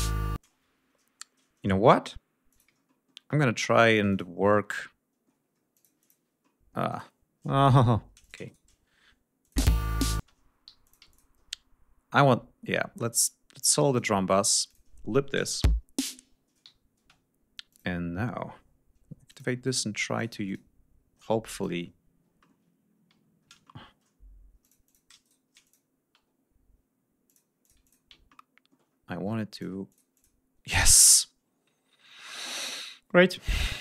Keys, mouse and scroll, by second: 0.3 space, 2.4 ctrl+click, 2.8 ctrl+middle click, 4.0 ctrl+click, 4.6 ctrl+middle click, 5.6-6.2 ctrl+drag, 6.3 middle click, 6.7-7.1 scroll up 4, 6.8 click, 7.5 shift+scroll down 2, 8.1-8.6 shift+drag, 8.4 shift+right click, 8.8 shift+scroll down 2, 9.3 click, 9.5 space, 10.6 g, 10.8-11.3 ctrl+drag, 12.1-13.0 scroll up 4, 13.8 click, 14.1 scroll down 2, 14.6 click, 15.5 l, 16.3 scroll down 2, 16.5 g, 16.9 space, 17.2 scroll down 2, 17.6 click, 19.2 click, 19.6 click, 20.1 click, 20.4 click, 21.5 click, 22.3 ctrl+right click, 23.5 ctrl+shift+right click, 24.5-25.0 drag, 25.1 shift+right click, 25.6 shift+click, 27.2 click, 27.5-28.0 drag, 28.2 ctrl+click, 29.4 click, 29.8 click, 30.7 scroll down 2, 31.2-31.5 scroll up 2.